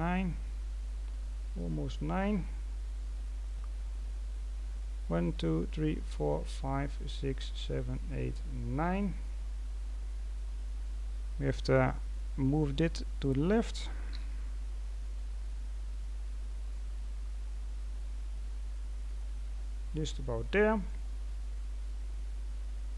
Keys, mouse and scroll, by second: 0.4-0.7 scroll down 2, 1.5 middle click, 2.3-2.7 scroll down 2, 2.7-3.2 scroll up 3, 3.2-4.1 scroll down 1, 4.1-7.2 scroll down 2, 8.8-10.1 scroll up 6, 10.1-10.7 scroll up 1, 10.7-12.1 scroll up 6, 12.1-12.4 scroll down 3, 12.4-12.8 scroll up 3, 12.8-14.0 scroll down 1, 14.0 g, 19.8-20.4 scroll down 5, 20.4 middle click, 21.0-21.6 scroll up 2, 21.6-22.9 scroll down 2.